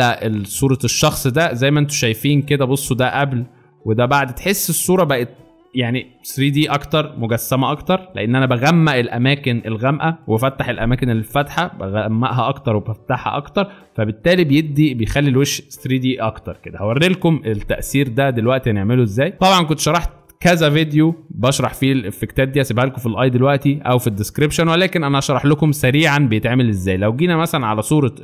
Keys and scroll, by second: 19.3 space, 27.1 alt+space.